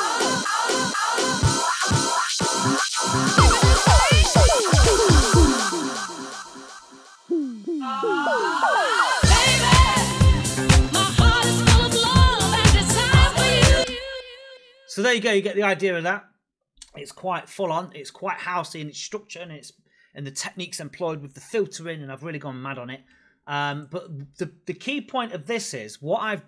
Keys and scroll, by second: 13.6 space.